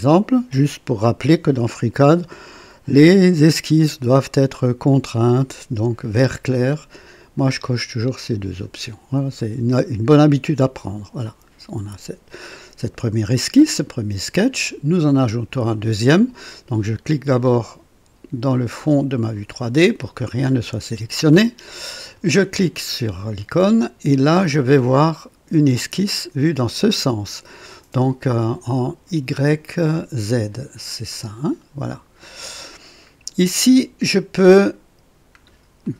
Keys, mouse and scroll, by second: 4.9-5.6 drag, 10.8 click, 19.1 click, 22.0 click, 31.2 click, 32.2 click, 34.1-34.5 scroll up 1, 35.4 scroll down 1, 35.8-35.9 right drag.